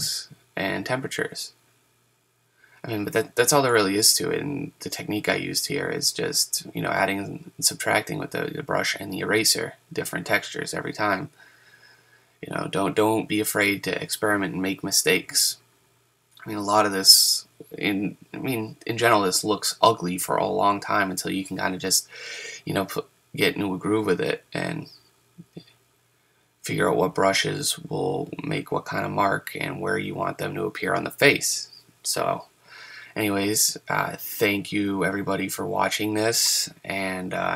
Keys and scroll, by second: 29.0 super+z, 35.3 ctrl+z, 37.3 ctrl+z.